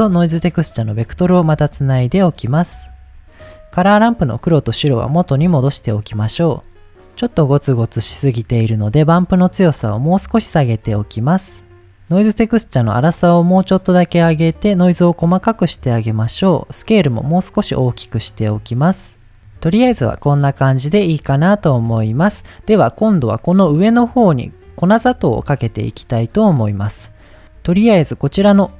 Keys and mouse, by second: 0.0 click, 0.9-2.2 drag, 2.5 middle click, 3.8 drag, 4.4-4.8 drag, 5.2 click, 5.9 middle click, 7.4 middle click, 9.2-11.9 drag, 12.6-15.4 drag, 16.2-18.8 drag, 19.9 middle click, 26.3 middle click, 27.2 middle click, 28.2 click.